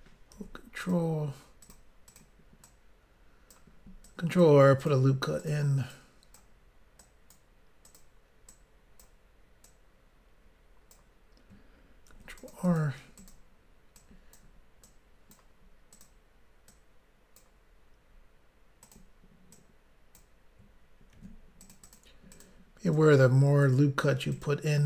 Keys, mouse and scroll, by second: 0.3 ctrl+r, 0.8 click, 0.9 click, 1.6 click, 1.7 click, 2.1 click, 2.2 click, 2.6 click, 4.0 click, 4.8 click, 4.9 click, 5.9 click, 7.0 click, 7.8 click, 8.0 click, 8.5 click, 9.6 click, 12.1 ctrl+r, 12.4 click, 12.5 click, 12.6 click, 12.8 double click, 13.2 double click, 13.3 double click, 14.0 double click, 14.8 click, 15.9 click, 16.0 click, 16.7 click, 18.8 click, 18.9 click, 19.5 click, 21.1 ctrl+r, 21.6 click, 21.8 click, 21.9 double click, 22.3 double click, 22.4 double click, 22.9 double click, 24.3 click, 24.4 click.